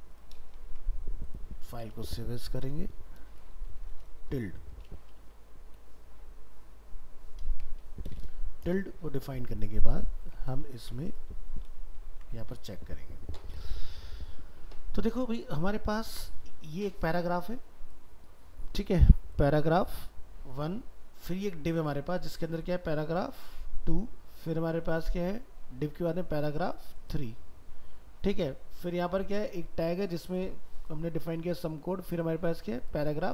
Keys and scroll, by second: 0.7 ctrl+Tab, 1.9 alt+f, 10.5 ctrl+a, 10.8 ctrl+c, 11.4 ctrl+a.